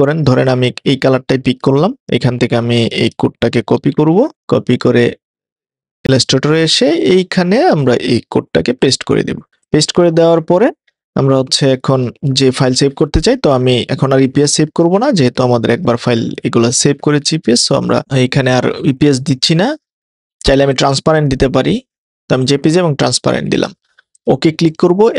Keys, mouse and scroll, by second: 3.8 super+c, 4.4 click, 6.6 click, 8.6 super+v, 9.6 click.